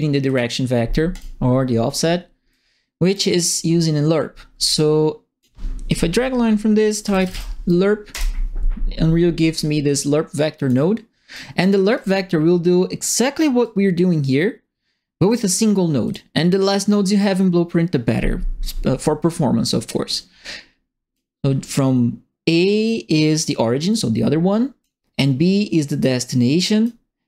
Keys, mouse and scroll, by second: 0.2 right click, 1.1 right click, 2.5 right click, 3.4 click, 4.7 click, 6.7-7.7 typing, 8.1 Return, 9.5-10.6 drag, 11.3 right click, 11.9 click, 13.6-15.4 drag, 16.0 click, 16.9 right click, 20.1 click, 22.8 right click, 23.9 click, 26.0 click.